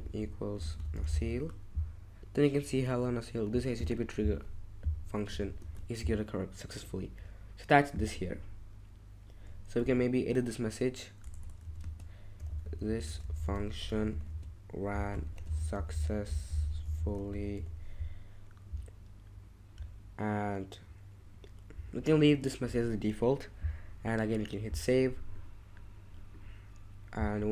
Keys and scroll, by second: 0.0-1.8 typing, 5.6 ctrl+shift+Tab, 9.8 BackSpace, 11.2-18.0 typing.